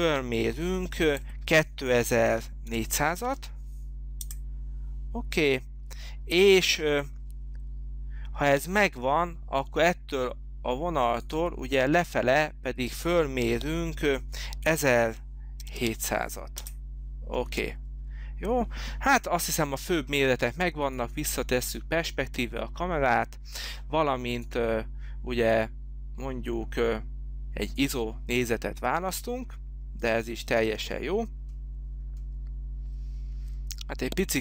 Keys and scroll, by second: 2.2 2, 2.8 4, 3.4 0, 4.4 Return, 14.6-16.3 typing, 16.8 Return, 17.5 space.